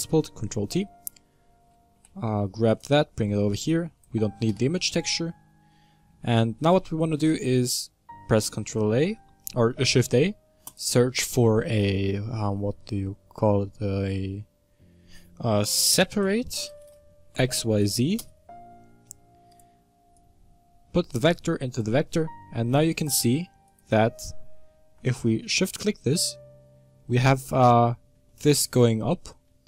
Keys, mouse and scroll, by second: 0.3 ctrl+t, 4.4 x, 20.0 click, 22.9 ctrl+shift+click, 23.6 ctrl+shift+click, 25.7-29.6 middle drag.